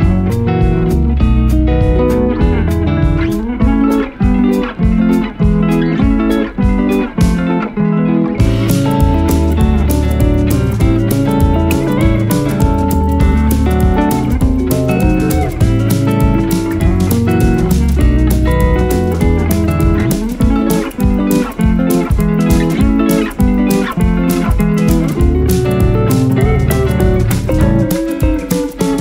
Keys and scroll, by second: 0.9 shift+Page_Up, 1.3 shift+F2, 1.9 Escape, 17.3 space, 17.5 F3, 20.8 Escape, 28.9 F2.